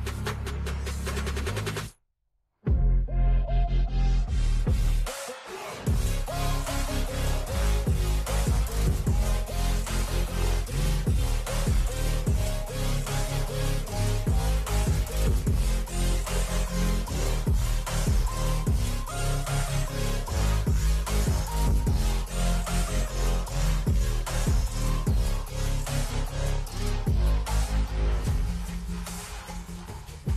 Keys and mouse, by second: 0.0-0.3 typing, 4.0 v, 5.2 BackSpace, 6.1 click, 8.2 v, 9.0 click, 10.6 Right, 10.8 Right, 11.1 Down, 11.8 Right, 13.9 click, 19.3 click, 19.7 click, 20.5 click, 21.8 click, 27.6 click, 29.9 Down, 30.2 Down.